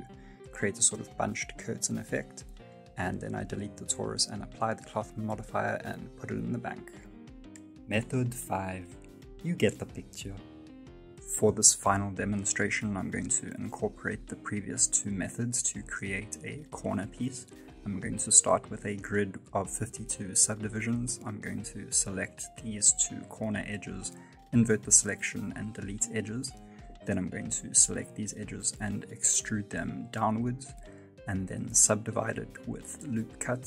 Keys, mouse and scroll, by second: 0.2 click, 0.4 click, 0.8 click, 1.1 middle click, 1.5 right click, 1.7 x, 2.0 right click, 2.1 middle click, 2.5 g, 4.2 right click, 4.3 scroll down 3, 4.6 middle click, 5.3 x, 6.2 middle click, 11.1 F9, 11.8 click, 13.8 middle click, 14.8 alt+click, 19.2 middle click, 19.6 shift+middle click, 20.1 Tab, 20.6-20.9 scroll up 2, 20.9 shift+middle click, 21.3 2, 21.7 right click, 22.0 alt+right click, 22.7 alt+shift+right click, 23.6 ctrl+i, 24.7 x, 25.8 middle click, 26.8 Tab, 27.4 Tab, 28.0 a, 28.3 middle click, 28.8-29.4 scroll down 3, 29.2 e, 30.9 shift+middle click, 31.6 ctrl+r.